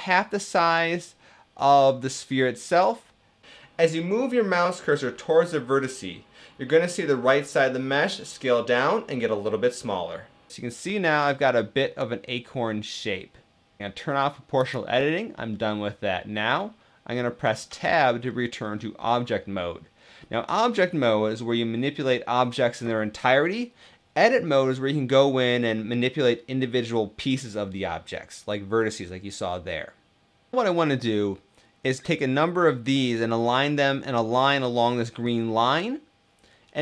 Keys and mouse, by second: 10.0-13.9 middle drag, 14.6 click, 15.2-17.2 middle drag, 17.2 Tab, 18.0-19.5 middle drag.